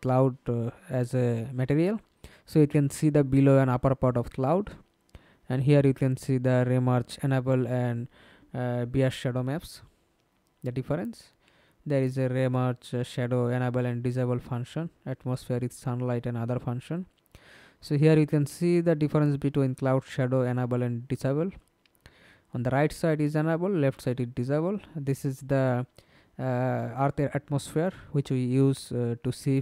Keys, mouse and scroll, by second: 0.3-0.6 scroll down 3, 1.7 scroll down 3, 2.4-3.3 scroll down 5, 3.3 scroll up 2, 4.7-6.8 scroll down 3, 9.9-12.0 scroll down 5, 12.0 scroll down 5, 13.4 scroll down 1, 14.9 scroll down 4, 22.7-23.6 scroll down 13, 23.6-24.4 scroll down 1, 24.4 scroll down 2, 26.8-28.2 scroll down 4.